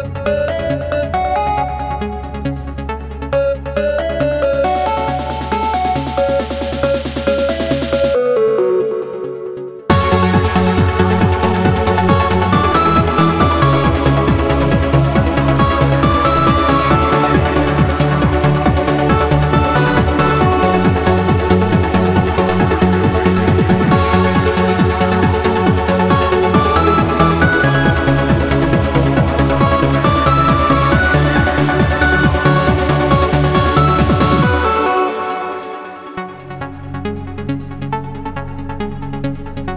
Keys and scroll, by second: 1.1 super+0, 1.8 super+-, 17.5 Return, 29.5 b, 30.3 shift+0, 31.4-32.2 typing, 33.5 d, 34.1 w, 34.7 q, 37.2 q.